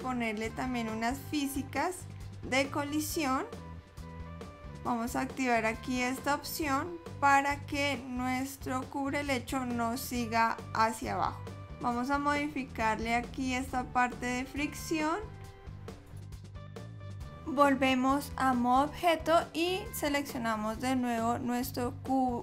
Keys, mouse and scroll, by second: 1.3 click, 11.0 click, 18.8 click, 20.4 click.